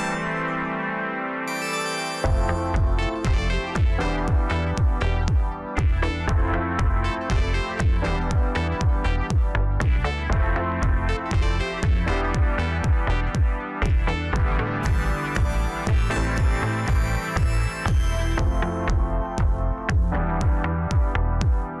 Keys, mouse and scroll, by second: 3.9 scroll down 3, 4.2-4.8 middle drag, 4.8-5.3 scroll up 6, 5.4-8.5 middle drag, 8.9 click, 10.5 Tab, 11.0 scroll up 2, 12.2 click, 13.0 shift+click, 13.9-16.2 right drag, 16.2 click, 17.2 x, 18.9-19.4 scroll down 1, 19.4 Tab, 20.5-21.8 scroll down 1.